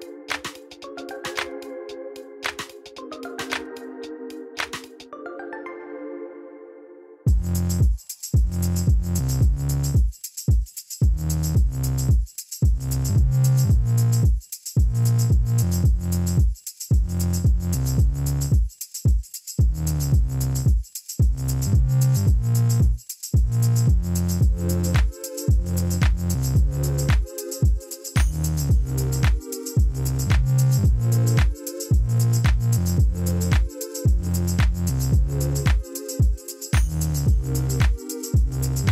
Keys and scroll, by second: 7.9 \, 11.5 ., 15.0 Tab, 15.2 a, 15.6 s, 15.9 ., 16.1 4, 16.8 Escape, 17.5 s, 17.7 1, 17.8 ., 18.0 4, 18.3 Return, 18.7 Tab, 19.6 Tab, 20.0 a, 20.7 1, 20.9 ., 21.0 4, 21.2 Return, 21.5 Tab, 29.8 alt+a, 36.7 Tab, 36.9 a, 38.7 u.